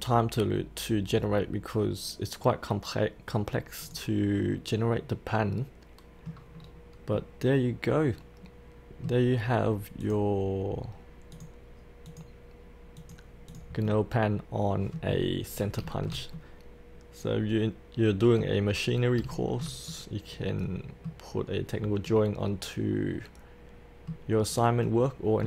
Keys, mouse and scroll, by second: 3.8 click, 4.4-6.5 middle drag, 6.5-7.1 scroll down 1, 7.1-9.7 middle drag, 10.0 click, 13.8-15.7 middle drag, 15.8-18.7 shift+middle drag, 18.7-19.1 scroll down 1, 19.3-24.3 shift+middle drag, 24.3-24.7 scroll down 1, 24.7 scroll up 1, 24.8 middle click.